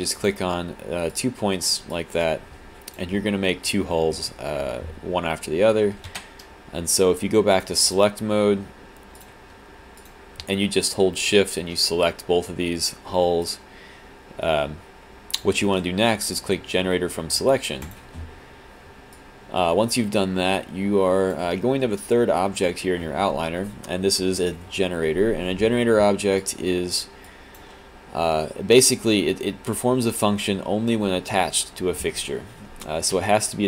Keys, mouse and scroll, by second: 0.2 click, 1.1 click, 1.9 alt+s, 1.9 alt+click, 6.1 q, 9.2 click, 10.0 shift+click, 13.4 click, 19.2 alt+click, 26.4 click, 27.3 click, 33.2 w.